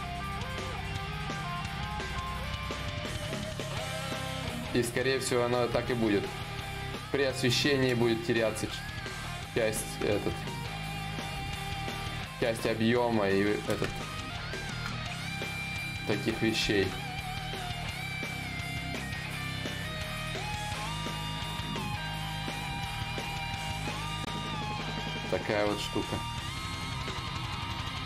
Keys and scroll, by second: 1.4 c, 1.8 0, 2.6 s, 21.4 ctrl+z, 21.4 y, 22.0 s, 22.6 d.